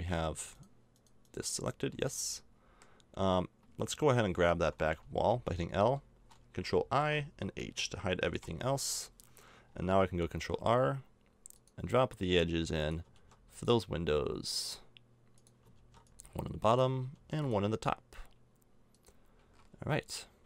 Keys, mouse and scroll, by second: 1.6 middle click, 1.7-3.1 right drag, 1.9 a, 3.1-7.0 middle drag, 5.3 l, 7.0 ctrl+i, 8.4 h, 9.3 middle click, 10.3 ctrl+r, 13.1 ctrl+r, 15.8 ctrl+r, 17.1 ctrl+r, 19.4 a, 19.7 Tab, 20.4 z.